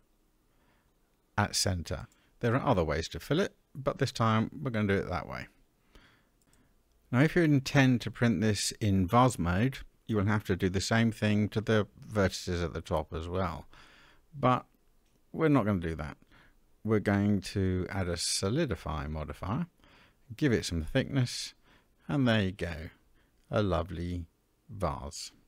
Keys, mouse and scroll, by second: 2.2-3.9 middle drag, 4.0-5.1 scroll down 2, 5.1 scroll down 1, 5.7-7.0 middle drag, 7.0-7.3 scroll down 2, 7.3-9.8 middle drag, 10.6 Tab, 11.1-12.2 middle drag, 12.8-13.2 shift+middle drag, 15.4-18.3 drag, 20.1-22.1 drag, 22.4-23.4 middle drag, 23.4-24.1 scroll up 2, 24.1-25.4 middle drag.